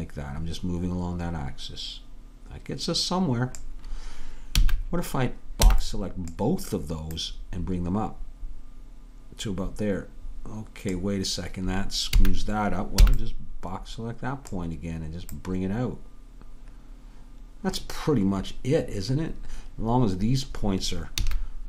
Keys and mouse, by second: 4.6 a, 7.2-9.2 drag, 12.2 a, 15.4-17.8 drag, 21.3 a.